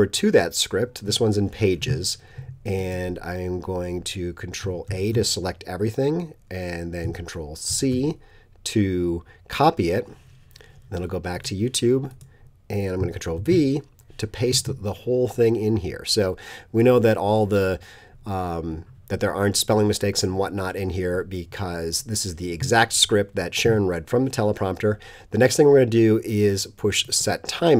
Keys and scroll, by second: 4.9 super+a, 7.7 super+c, 13.4 super+v.